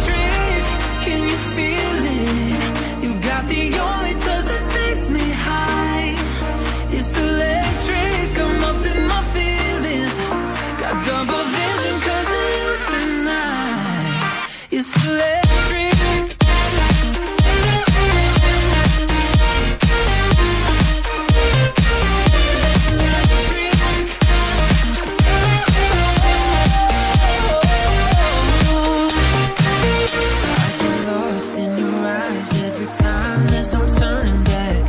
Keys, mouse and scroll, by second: 2.8 click, 4.8 double click, 5.6 click, 11.8 click, 18.9 double click, 19.3 click, 19.4 double click, 20.0 click.